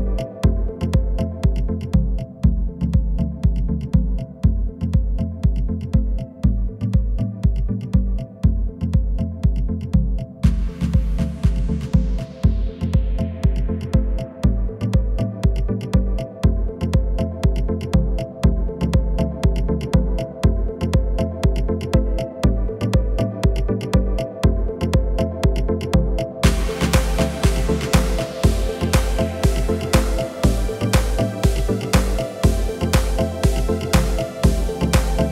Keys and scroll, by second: 2.4 s, 4.4 shift+z, 8.1 Tab, 13.6 Tab, 14.7 KP_1, 17.3 ctrl+r, 18.1 Escape, 19.6 s, 21.6 Tab, 32.8 shift+a.